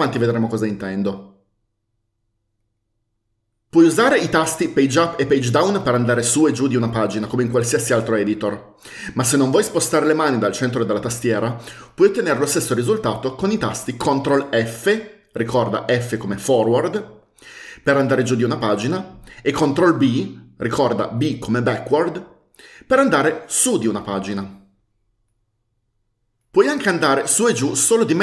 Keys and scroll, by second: 5.1 Page_Up, 5.8 Page_Down, 14.7 ctrl+f, 20.2 ctrl+b.